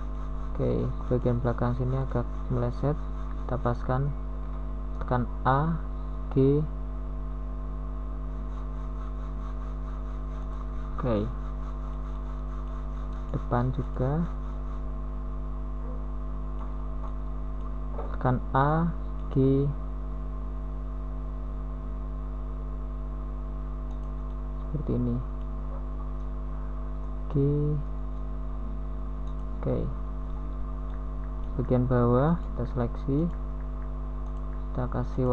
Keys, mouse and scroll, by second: 2.6 z, 4.5 KP_3, 4.7 z, 6.9 u, 10.4 s, 11.1-13.2 drag, 13.7 g, 16.5 s, 18.0 g, 22.4 g, 27.1 g, 29.0 middle click, 33.8 g, 33.8 a, 35.0 g.